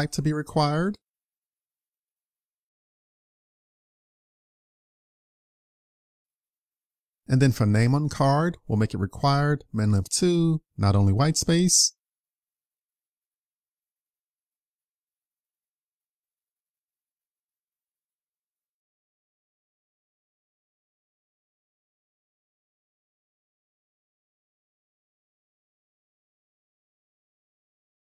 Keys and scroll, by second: 6.2 super+c, 7.8 super+v, 23.6 super+c, 24.9 super+c, 26.8 super+v.